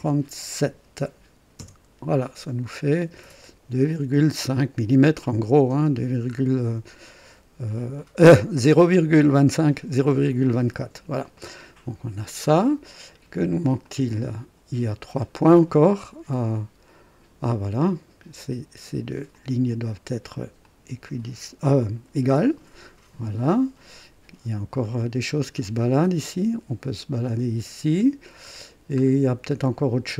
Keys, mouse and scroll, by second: 0.0-0.5 typing, 1.5 KP_Enter, 4.2-5.4 drag, 5.5 click, 5.8 typing, 6.3 scroll up 1, 10.8 scroll down 2, 11.4 right click, 12.0-12.4 scroll down 2, 12.6 scroll up 2, 13.8 click, 16.4-18.5 drag, 19.3 click, 20.6 click, 22.2 e, 24.8-28.2 drag, 28.5 scroll down 1.